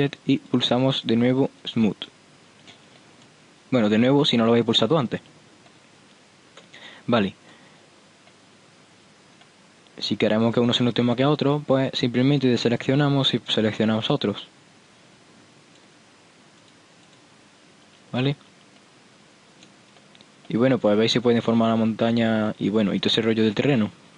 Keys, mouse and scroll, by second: 0.1 Tab, 1.9-2.7 drag, 2.7 Tab, 5.4 Tab, 7.3 middle click, 8.5-10.7 middle drag, 10.7-12.9 right drag, 12.9 click, 13.2-14.7 right drag, 14.3 click, 14.7 right click, 14.9 click, 16.7 click, 18.0 Tab, 18.6 Tab, 21.9-22.8 middle drag, 23.1 middle click.